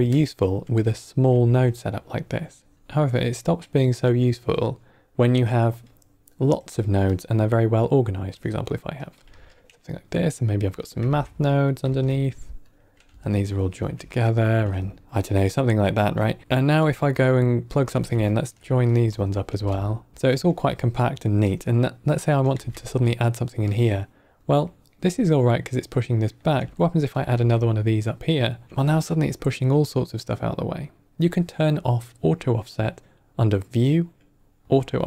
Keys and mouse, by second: 0.4 middle click, 1.0 ctrl+middle click, 2.5 click, 4.2-4.7 drag, 7.0-7.9 drag, 8.2 drag, 8.6 click, 9.1 click, 9.3 q, 11.0 shift+d, 11.8 shift+d, 13.2 alt+right drag, 13.5 alt+right drag, 14.2 middle click, 14.8 alt+right drag, 16.8 middle click, 18.2 alt+right click, 19.0 drag, 19.4 g, 20.1 ctrl+middle click, 21.4 click, 22.4 shift+d, 24.6 middle click, 25.7 click, 26.5 shift+d, 26.7 x, 27.1 click, 27.2 shift+d, 28.6 ctrl+middle click, 30.0-30.7 middle drag, 32.5-35.0 drag.